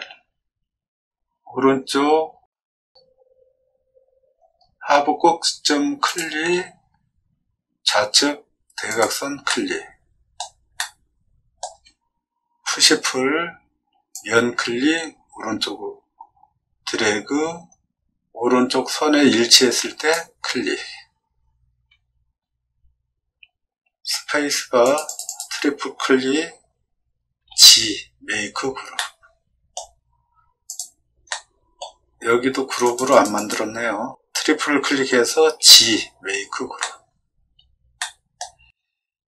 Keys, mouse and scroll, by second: 1.9-2.3 scroll up 2, 2.8 scroll down 1, 2.9 middle click, 4.5 middle click, 6.5 middle click, 8.9 click, 9.4 middle click, 10.7 middle click, 12.5 p, 14.3-20.1 drag, 24.1 space, 25.2 click, 27.3 g, 28.9 middle click, 31.2 middle click, 32.8 click, 33.0 click, 33.3 click, 35.5 g, 36.8 middle click, 37.9 middle click, 38.8 middle click.